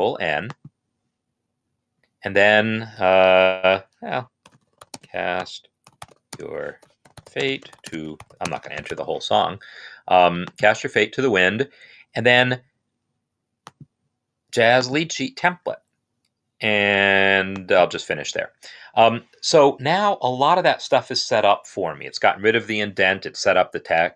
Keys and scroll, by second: 3.7-9.2 typing.